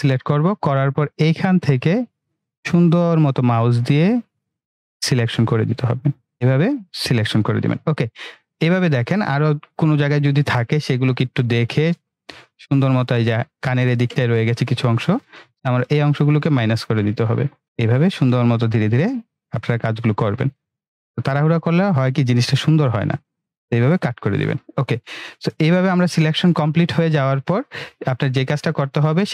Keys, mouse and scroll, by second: 9.2-9.6 scroll down 1, 9.6 scroll up 1, 10.9 space, 11.2 click, 11.4-13.1 space, 11.8 click, 12.2 space, 13.4 click, 13.5-14.0 space, 15.7-23.9 drag, 25.7 ctrl+-, 27.8 ctrl+=, 28.8 ctrl+-.